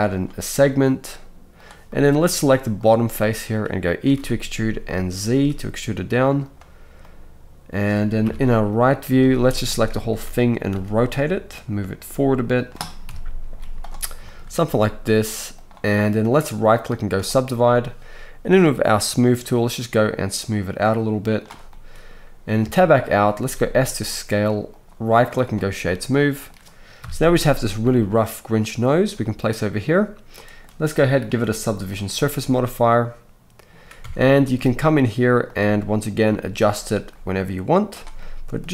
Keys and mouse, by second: 1.6-2.8 drag, 2.8-9.6 middle drag, 4.0 e, 8.2 KP_3, 9.2 z, 9.6 shift+click, 10.1 a, 10.7 r, 12.0 g, 13.0 KP_1, 13.5 z, 14.2 shift+click, 14.6 s, 15.0-16.7 middle drag, 16.7-18.5 right drag, 18.6-22.1 right drag, 19.7-22.1 drag, 19.7-24.8 middle drag, 22.6 Tab, 23.4 s, 24.8-25.6 right drag, 25.6-25.9 drag, 25.9-31.1 right drag, 27.0 KP_3, 27.8 g, 31.1-35.5 middle drag, 34.0 Tab, 35.5-38.7 right drag, 36.2 g.